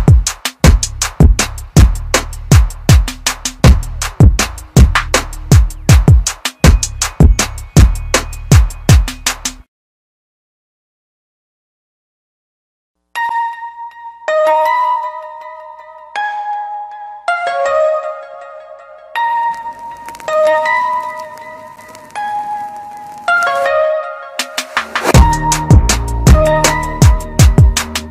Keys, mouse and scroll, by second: 3.6 click, 16.0 click, 23.9 click, 26.3 right click.